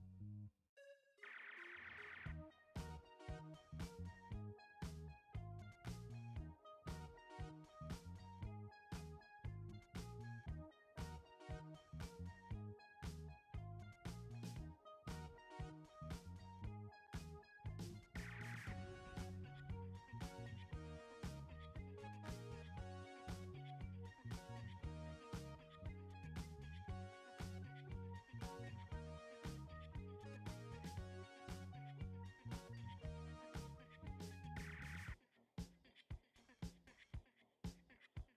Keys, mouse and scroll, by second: 1.2 click, 2.8 ctrl+t, 5.8-11.2 drag, 11.2-14.2 drag, 16.9 ctrl+t, 19.4-28.6 shift+drag, 35.8-38.3 drag.